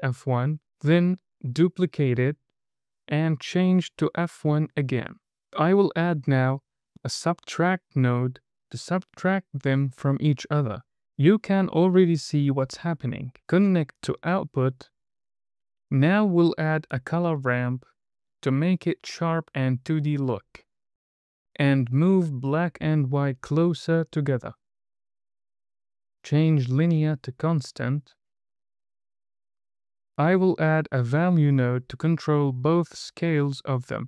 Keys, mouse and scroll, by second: 1.5 shift+d, 3.2-4.0 drag, 5.6 drag, 8.3 Down, 8.4 Down, 9.3 click, 10.5 click, 11.3 drag, 13.9 drag, 16.4 shift+a, 19.6 click, 21.5 click, 23.5 click, 24.6-25.4 scroll up 7, 25.4 middle click, 26.0-26.8 drag, 27.3-29.4 drag, 30.2 shift+a, 31.9 drag, 32.4 drag, 33.3 scroll down 2, 33.5 middle click.